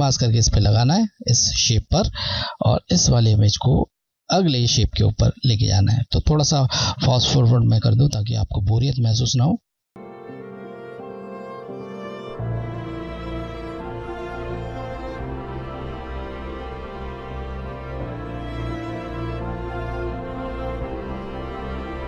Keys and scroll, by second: 3.0 Left, 8.1 Left, 9.8 j, 9.9 Left, 10.3 Left, 11.5 ctrl+j, 11.9 Left, 12.4 Left, 14.8 Left, 15.2 Left, 16.7 ctrl+j, 17.1 Left, 17.9 Left, 19.8 ctrl+j, 20.2 Left, 21.0 Left.